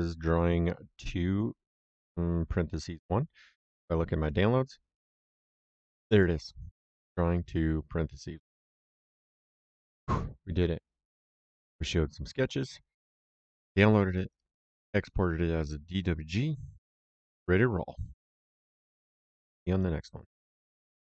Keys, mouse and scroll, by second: 4.1 click, 6.0 click, 11.5 click.